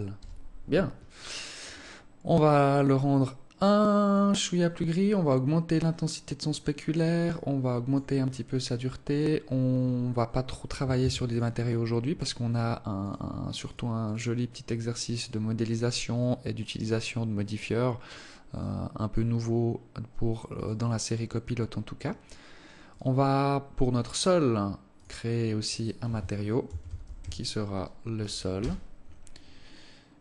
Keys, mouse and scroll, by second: 2.0 click, 5.5 click, 7.7 click, 8.6-9.3 scroll down 2, 9.3-9.7 scroll down 5, 10.2 scroll up 4, 10.4 scroll down 1, 10.5-11.1 scroll up 3, 11.5 ctrl+s, 13.5 right click, 14.2 right click, 14.5 right click, 15.7 right click, 16.3 right click, 16.7 right click, 18.1 right click, 19.1 right click, 19.9 right click, 21.2 right click, 22.5 right click, 23.5 right click, 25.5 click, 26.3 click.